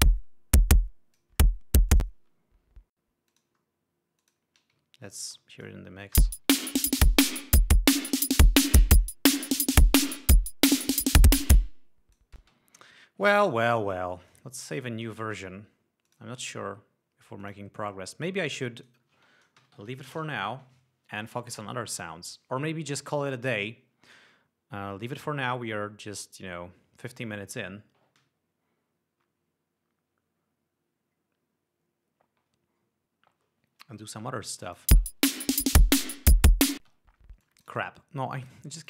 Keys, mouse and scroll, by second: 0.4-1.9 drag, 2.4 click, 3.7-5.0 drag, 5.3 ctrl+scroll down 2, 5.7 ctrl+space, 5.8 ctrl+click, 6.7 space, 7.1 ctrl+scroll up 2, 8.4 click, 11.6 click, 14.7 click, 15.1 click, 16.5 click, 17.8-18.8 drag, 19.2 click, 19.6-20.7 typing, 35.0 click, 35.4 space, 35.9 scroll down 1, 36.2 scroll up 1, 36.7 scroll down 1, 37.3 space, 37.9 click.